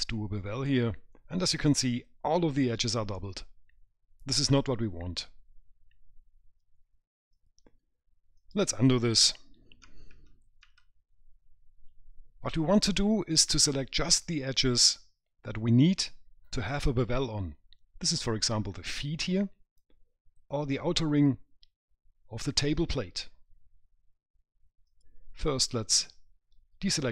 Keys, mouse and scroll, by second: 0.4 click, 8.3 click, 10.1 ctrl+z, 10.6 ctrl+z.